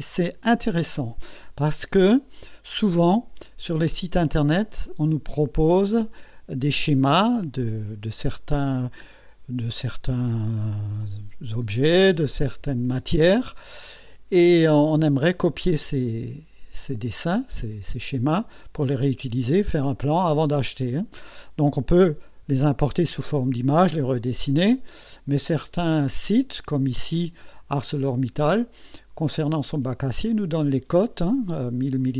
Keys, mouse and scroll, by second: 2.9 click, 4.9 click, 26.7 click.